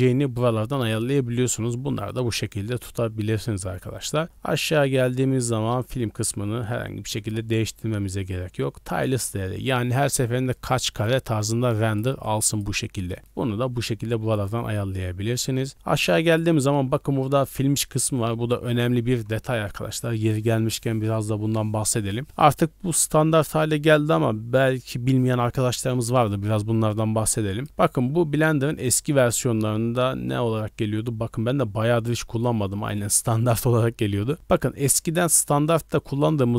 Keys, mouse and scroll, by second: 1.8 d, 2.0 right click, 2.5 d, 3.1 scroll down 1, 4.4-5.2 scroll down 9, 5.8 click, 7.1 click, 8.0 scroll down 1, 9.9 scroll down 1, 9.9-13.2 typing, 10.5-11.0 drag, 11.4 click, 12.2 click, 12.8 right click, 13.8 scroll down 1, 14.8-16.2 scroll down 6, 16.2 click, 16.6 scroll down 1, 18.5 z, 26.2-26.6 scroll up 1, 27.5-33.3 drag.